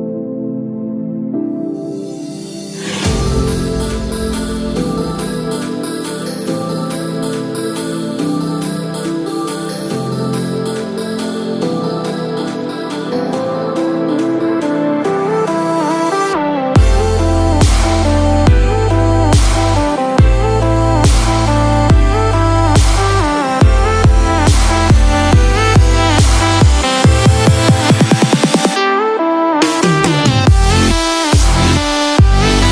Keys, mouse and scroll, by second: 0.3 click, 8.5 click, 8.5-10.1 scroll down 2, 10.1 click, 13.5 middle click, 13.5 click, 13.5-13.9 scroll up 4, 14.6 click, 24.5 middle click, 26.4 shift+middle click, 26.4-26.9 scroll up 2, 26.9 shift+middle click, 27.5 middle click, 29.5 click.